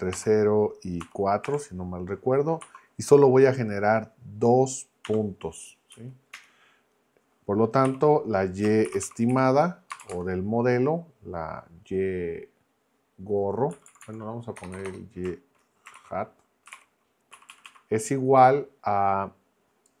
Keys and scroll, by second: 0.1 0, 1.0 ', 1.4 4, 2.6 ', 5.0 2, 5.9 Right, 6.3 Return, 7.8-10.1 typing, 13.7 Left, 14.6 BackSpace, 16.0-17.2 typing, 17.3 Right.